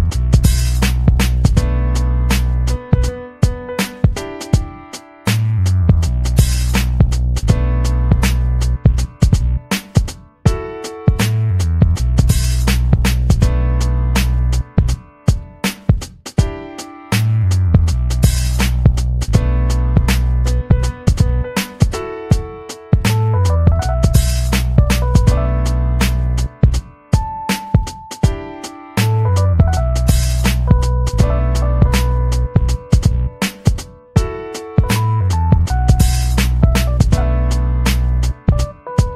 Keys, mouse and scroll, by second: 0.2 click, 0.3 click, 0.9 click, 2.0 click, 2.2 click, 2.5 ctrl+scroll up 2, 3.0 ctrl+v, 3.5 click, 4.1 click, 4.9 click, 7.7 click, 8.4 click, 8.9-11.0 typing, 11.5 click, 11.9-14.0 drag, 14.8 click, 15.4 click, 16.0 click, 16.6 click, 17.6 click, 18.1 click, 19.1 click, 20.3 click, 20.9 ctrl+scroll down 2, 22.7 ctrl+scroll down 2, 25.1-26.3 ctrl+drag, 26.6 click, 27.2 ctrl+scroll up 2, 28.1 click, 29.0 click, 29.3 click, 30.5 click, 31.1 click, 32.8 click, 33.3-35.1 drag, 35.4 click, 36.0 ctrl+scroll down 2, 36.2 ctrl+click, 36.6 ctrl+scroll up 2, 38.8 click.